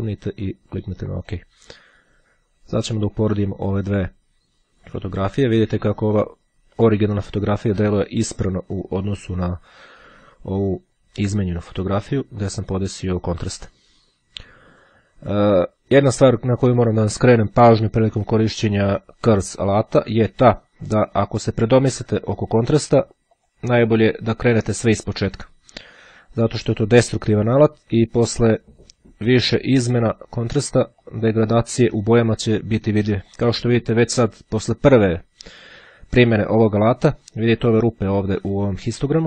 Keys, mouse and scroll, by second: 1.3 click, 2.9-3.9 drag, 5.0 click, 6.1 click, 8.7 click, 23.4 click, 30.7-31.7 drag, 32.9-33.9 drag.